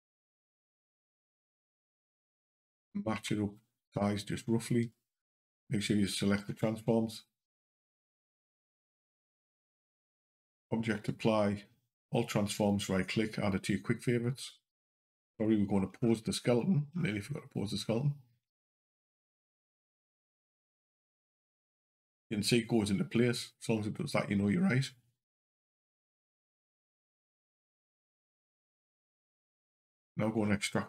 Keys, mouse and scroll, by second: 3.0 s, 4.6 q, 8.3 click, 14.9 click, 15.0 scroll down 2, 15.8 scroll up 2, 16.8 scroll up 1, 17.7-18.3 scroll up 1, 20.6 click, 26.1 click, 27.2 click, 30.2 scroll up 2.